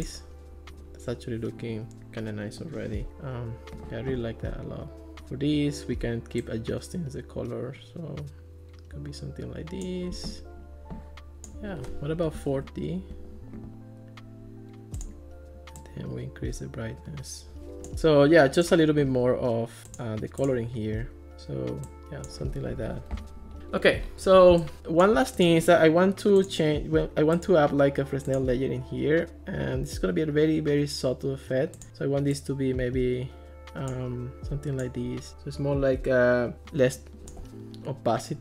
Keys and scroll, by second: 12.1-13.0 typing, 22.7 Escape.